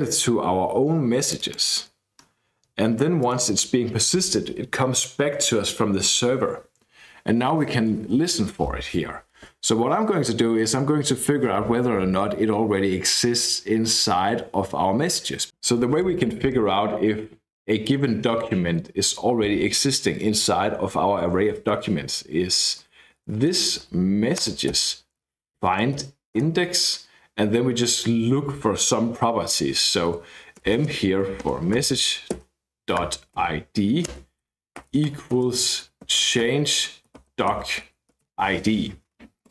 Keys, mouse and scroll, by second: 1.2 click, 2.1-3.2 scroll down 2, 3.2 click, 22.6-26.5 typing, 24.4 Return, 30.6-38.2 typing, 38.3 Escape.